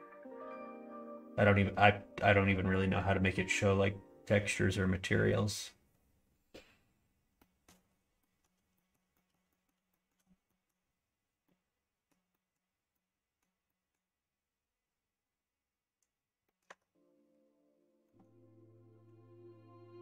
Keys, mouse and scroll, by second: 7.5 middle click, 8.3 middle click, 8.8 shift+middle click, 9.2 middle click, 10.0 shift+middle click, 10.6 middle click, 11.5 middle click, 12.4 middle click, 12.9 middle click, 13.6 middle click, 16.6 middle click, 16.6 Tab, 18.2 middle click.